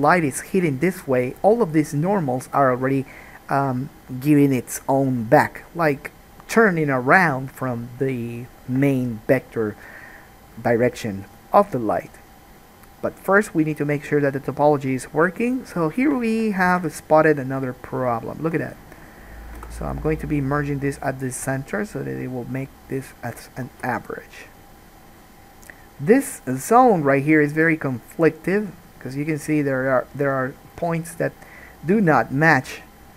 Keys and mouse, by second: 16.9 1, 17.4 click, 18.2 shift+click, 19.7 m, 23.6 alt+middle click, 23.8 alt+a, 24.0-26.6 middle drag, 26.6-33.1 drag.